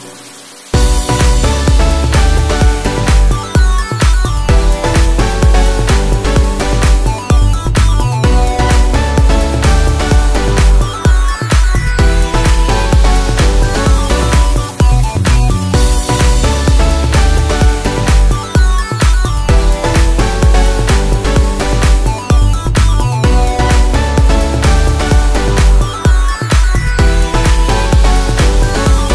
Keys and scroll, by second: 20.9 ctrl+d, 27.0 ctrl+t, 28.9 ctrl+t.